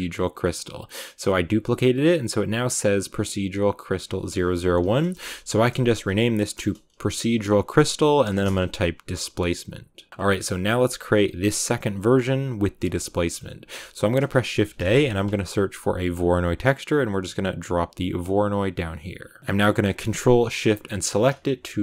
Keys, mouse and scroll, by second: 0.0-10.1 drag, 10.1 a, 16.1 shift+a, 20.8 ctrl+shift+click, 21.6 shift+middle click.